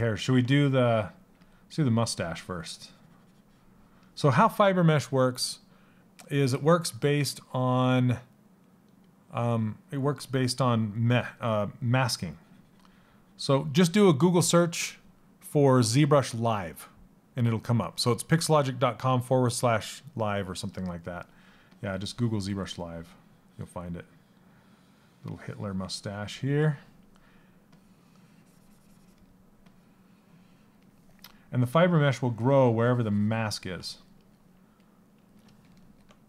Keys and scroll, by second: 0.9 s.